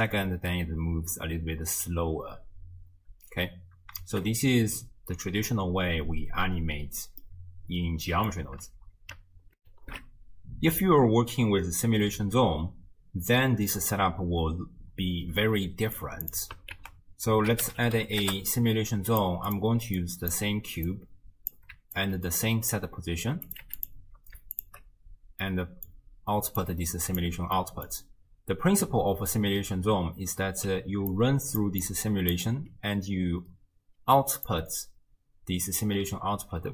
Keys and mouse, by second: 0.1 space, 4.1 shift+space, 7.2-8.4 drag, 9.6 ctrl+alt+shift+w, 9.7 ctrl+alt+shift+q, 15.5 click, 16.3 click, 16.8 ctrl+a, 19.5 click, 20.0 click, 20.9-21.6 drag, 22.0 alt+click, 23.5 click, 24.6 alt+shift+click, 25.5 middle click, 25.8 click, 26.6 click, 27.6 middle click, 30.7-32.5 typing, 31.1 click, 31.8 click, 34.0 d, 34.5-35.8 drag, 35.8 d, 35.9 d, 36.0 d, 36.4-36.7 d.